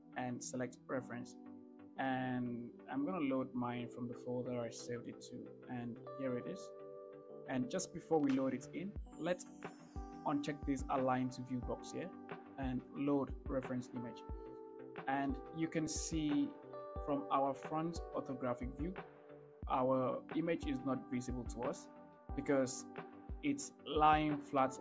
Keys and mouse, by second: 15.2-15.5 shift+middle drag, 23.3-24.8 middle drag.